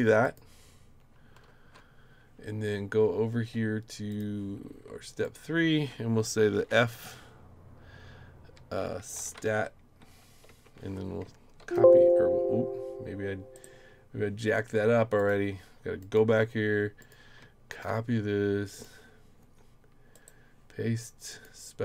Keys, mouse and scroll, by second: 0.2 click, 1.5 ctrl+c, 4.1 click, 5.2 click, 6.6 shift+f, 8.5-9.8 typing, 10.5 Tab, 11.6 ctrl+v, 13.5 right click, 15.2 click, 16.0 click, 17.0 click, 17.7 ctrl+c, 18.7 click, 20.1 right click, 21.3 click.